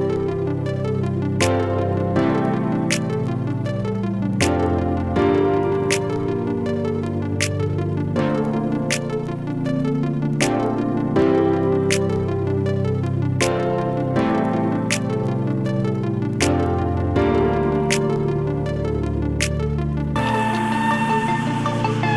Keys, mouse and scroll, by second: 0.0-5.2 drag, 8.5 alt+shift+click, 10.7-17.2 drag, 17.2 space, 17.3-22.1 drag.